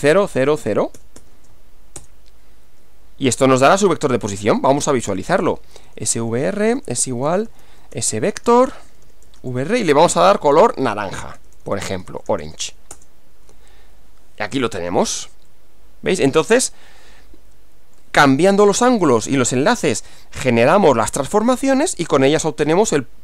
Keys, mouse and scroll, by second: 0.0-1.5 typing, 2.0 Return, 4.5 click, 5.4-13.0 typing, 15.5-18.2 middle drag, 15.5-18.2 scroll, 21.9 middle click.